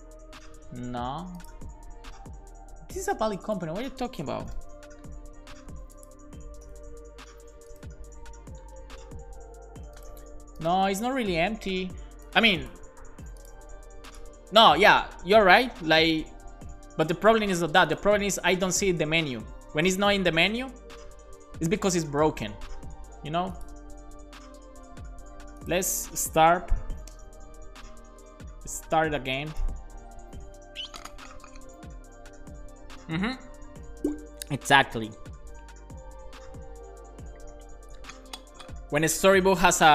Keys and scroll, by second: 4.1-5.0 typing, 6.3-7.2 typing, 26.5 ctrl+c, 26.9 Up, 27.1 Return.